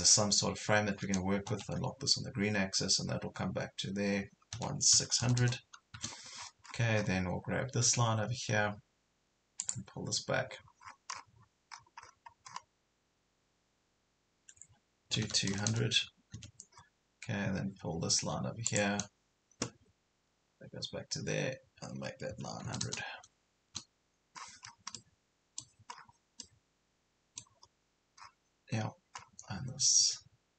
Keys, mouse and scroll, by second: 1.5 Left, 4.6 KP_1, 5.0 KP_6, 7.0 scroll up 1, 9.6 click, 10.5 scroll up 1, 10.8 scroll down 1, 11.7-12.1 scroll up 2, 12.6 scroll up 1, 15.1 KP_2, 15.5 KP_0, 16.8 scroll down 1, 18.7 click, 22.4 KP_9, 24.4 scroll down 1, 25.0 middle click, 26.0 scroll down 1, 26.4 middle click, 27.9 scroll up 1, 28.2 scroll down 1.